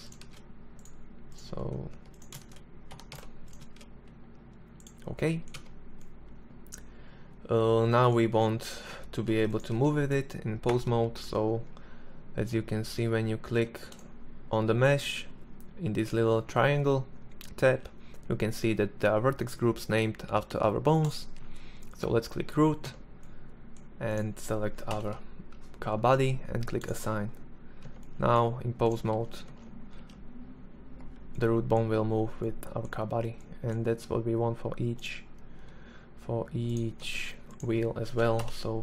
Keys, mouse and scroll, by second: 0.9 Tab, 1.4 shift+s, 2.1 Tab, 2.6 shift+s, 4.5 Tab, 8.2 ctrl+Tab, 8.4 right click, 8.7 g, 10.4 Tab, 12.5 Tab, 21.7 Tab, 23.8 ctrl+l, 25.8 click, 26.7 Tab, 27.7 right click, 28.0 ctrl+Tab, 28.3 ctrl+Tab, 28.8 g, 35.9 Tab, 37.2 ctrl+l.